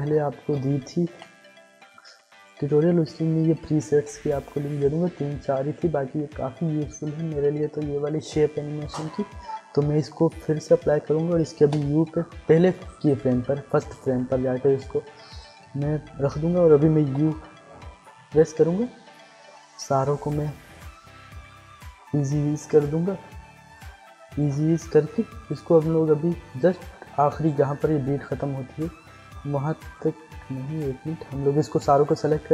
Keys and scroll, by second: 1.1 i, 11.6 u, 17.1 u, 30.3 ctrl+z.